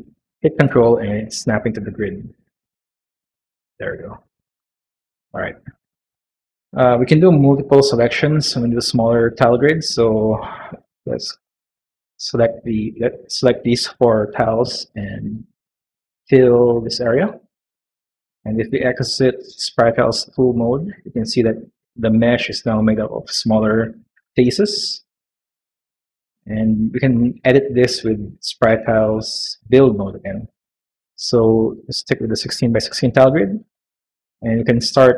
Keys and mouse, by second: 2.1 s, 16.8 click, 20.0 click, 21.9 shift+middle click, 22.5 middle click, 25.3 middle click, 26.0 middle click, 29.7 click.